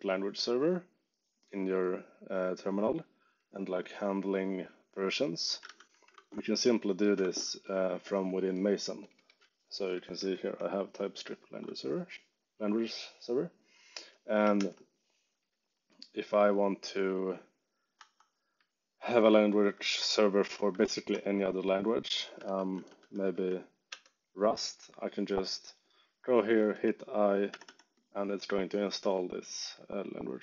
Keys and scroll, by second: 5.6 ctrl+c, 6.1 ctrl+shift+Tab, 8.2 j, 9.0 k, 9.3 j, 10.0 e, 14.5 shift+7, 17.9 Escape, 18.5 j, 19.5 ctrl+d, 22.2-23.8 typing, 23.8 Return, 26.7 i, 27.5 g.